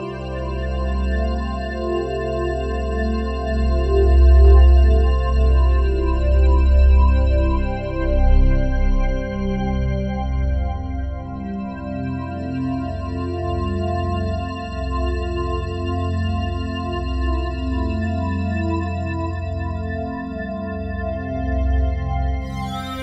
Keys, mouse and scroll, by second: 1.6-5.3 drag, 5.3 Escape, 7.3 click, 9.0 g, 9.5 z, 12.5 click, 17.4 super+d, 17.4-19.6 drag, 20.5-23.0 drag.